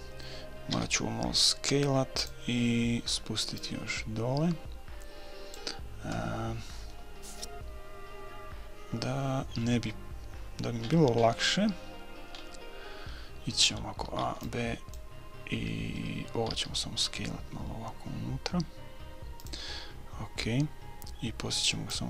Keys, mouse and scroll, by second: 0.8 s, 2.6-3.8 middle drag, 3.6-5.3 drag, 9.5-14.3 middle drag, 14.1 a, 14.3 b, 16.5 s, 19.9-21.8 middle drag, 21.9-22.0 drag.